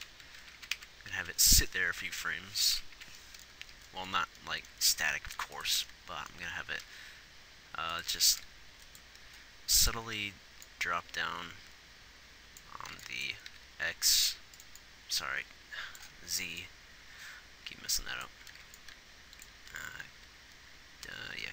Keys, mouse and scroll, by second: 0.7-1.1 Right, 1.5 Right, 3.3 Right, 5.6 ctrl+s, 7.0 g, 8.6 g, 12.3-13.8 drag, 13.8 g, 15.2 click.